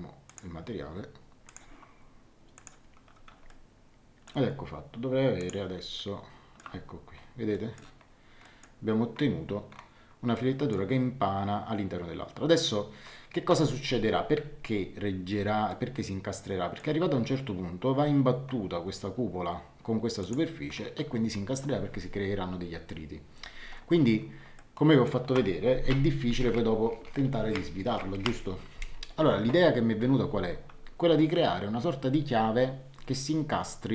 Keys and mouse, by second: 1.4 click, 2.5 click, 3.4 shift+middle click, 5.3 click, 5.9 shift+middle click, 7.5 middle click, 10.3 middle click, 15.7 shift+middle click, 20.2 click, 24.5 shift+middle click.